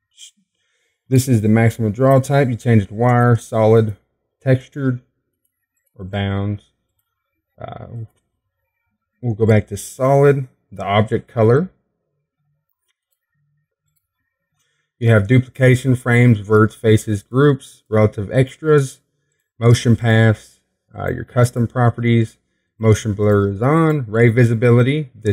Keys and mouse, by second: 1.4 click, 4.8-25.3 drag.